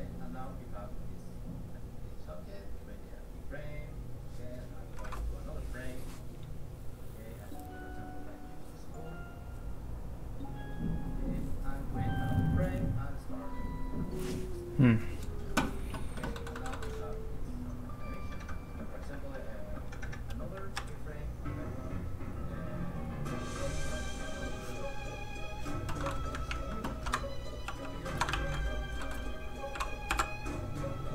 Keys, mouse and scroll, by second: 16.3 middle click, 16.7 shift+middle click, 18.0 click, 20.7 shift+x, 21.7 click, 26.0 middle click, 26.4 ctrl+Tab, 27.6 Tab, 27.7 f, 27.8 click, 28.3 ctrl+shift+d, 28.7 click, 29.0 shift+middle click, 30.0 shift+k, 30.4 click.